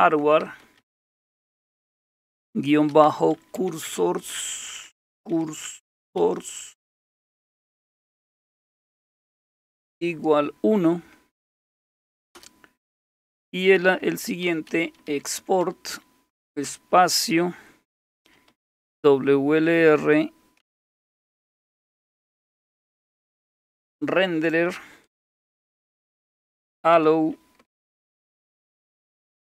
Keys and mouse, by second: 0.0-1.3 typing, 2.4-6.2 typing, 10.0 typing, 11.2 typing, 12.3 Return, 14.2-16.5 typing, 18.1-19.2 typing, 20.4-29.5 typing.